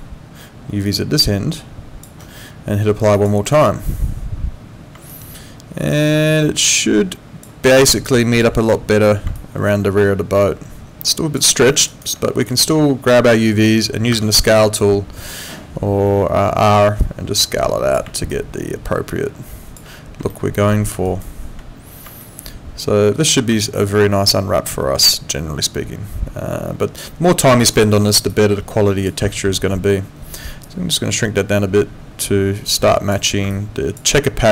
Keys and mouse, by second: 0.9 ctrl+shift+click, 3.2 click, 5.1 alt+click, 7.6 alt+middle click, 7.9 alt+right click, 8.2 alt+click, 9.3 alt+click, 11.7 alt+middle click, 11.9 alt+right click, 12.4 click, 17.0 click, 18.3 alt+click, 20.3 alt+middle click, 21.0 alt+right click, 22.2 alt+middle click, 23.6 alt+click, 27.7 alt+middle click, 28.0 alt+right click, 28.3 alt+click, 30.6 click.